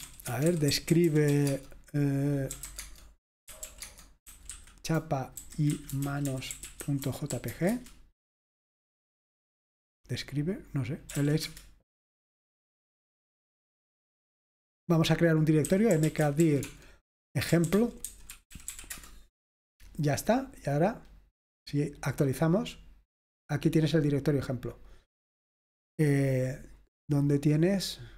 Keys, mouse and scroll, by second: 0.0-8.0 typing, 10.9-11.7 typing, 12.9 typing, 15.5-19.2 typing, 21.9 click, 25.0 click.